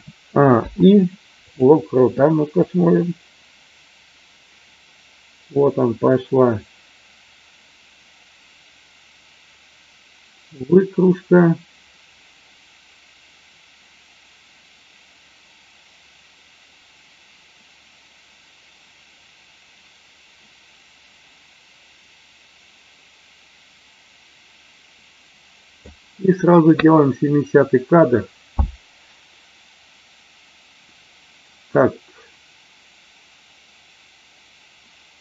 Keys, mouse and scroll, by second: 0.6 i, 2.5-25.9 drag.